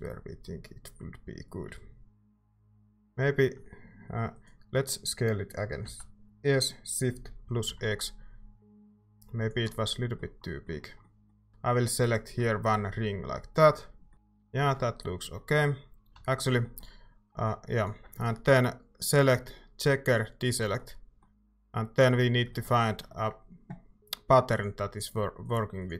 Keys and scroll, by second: 2.2 Tab, 2.9 s, 5.8 s, 7.6 x, 16.1 a.